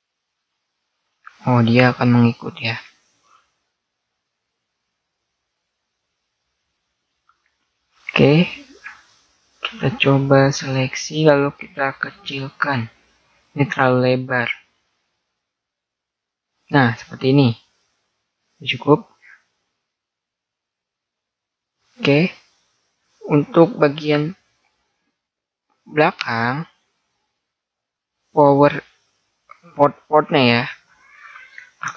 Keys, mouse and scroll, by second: 2.1 ctrl+z, 2.9-5.4 middle drag, 8.1 z, 12.2 z, 13.0 click, 16.3-21.0 middle drag, 16.9 a, 21.8-27.9 middle drag.